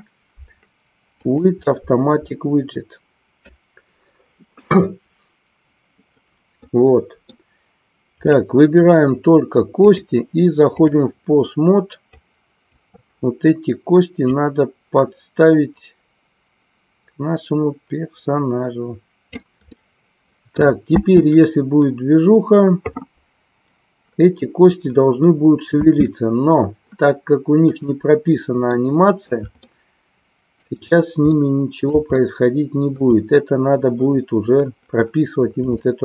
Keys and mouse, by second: 6.7 middle click, 9.9-11.0 drag, 12.3 click, 14.3-19.4 drag, 19.7-20.7 middle drag, 21.0 space, 25.9 space, 27.9 click, 28.8 middle click, 29.6-30.6 shift+middle drag, 31.4-33.0 middle drag, 35.9 shift+middle click.